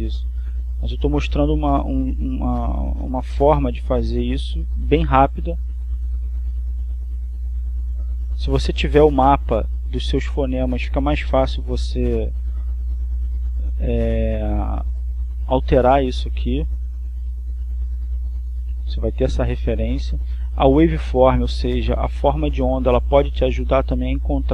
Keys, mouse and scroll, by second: 0.4-2.0 drag, 2.5 click, 4.0-6.6 drag, 7.4 click, 8.7-10.3 drag, 12.6 click, 13.2 click, 14.3-16.5 drag, 17.7 click, 18.7-20.2 drag, 20.9 click.